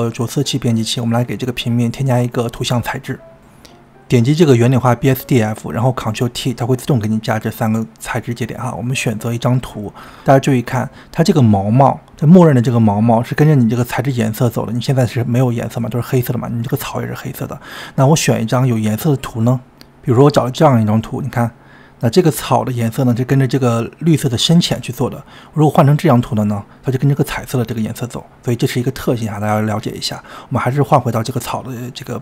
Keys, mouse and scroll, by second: 15.6-20.8 drag, 25.2-29.3 drag, 29.3-31.0 middle drag.